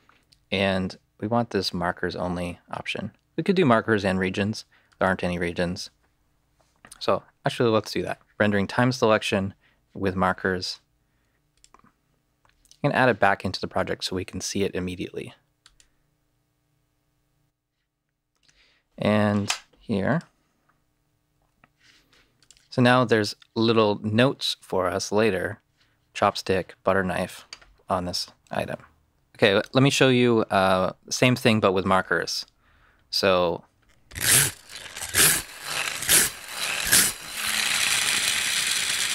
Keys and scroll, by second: 21.3 w, 33.7 alt+space.